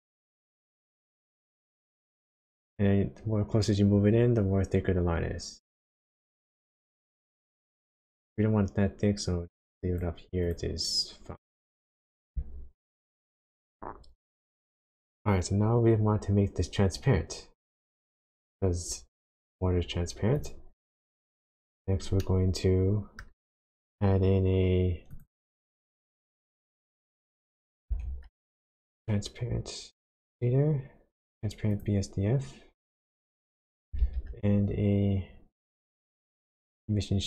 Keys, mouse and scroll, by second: 1.7 click, 10.4 click, 20.3 click, 21.0 click, 21.3-22.0 scroll down 2, 22.2 shift+middle click, 25.1 click, 27.9 shift+a, 33.9 shift+a.